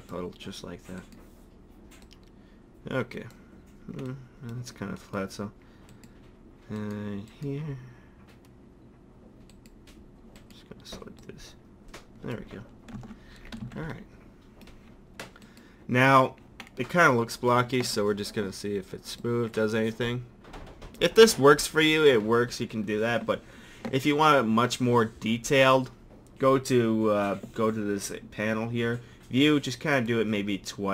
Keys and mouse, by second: 2.0-3.7 middle drag, 3.7 click, 5.9-11.2 drag, 11.2-12.6 middle drag, 12.9 click, 13.0 Tab, 13.6 a, 19.1-19.7 drag, 19.7-20.5 middle drag, 20.5 drag, 20.7-21.4 middle drag, 30.0 click.